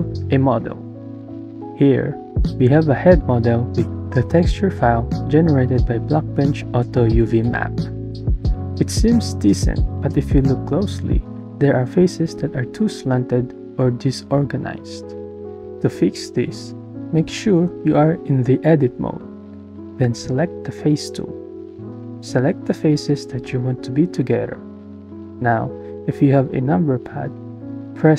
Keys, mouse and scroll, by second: 2.6 click, 3.0-3.7 drag, 4.0-6.1 drag, 6.8 click, 7.8 click, 8.8-10.3 middle drag, 11.7-14.5 middle drag, 15.1 click.